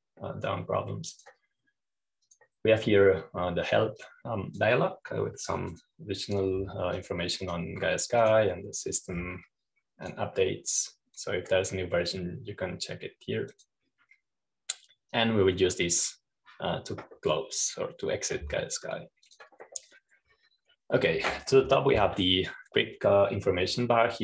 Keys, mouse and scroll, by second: 0.2-2.4 drag, 3.7 click, 4.7 click, 6.2-7.2 drag, 7.8 click, 8.9 click, 9.3 click, 10.1 click, 12.0 click, 15.5 click, 17.8 click, 21.2 click.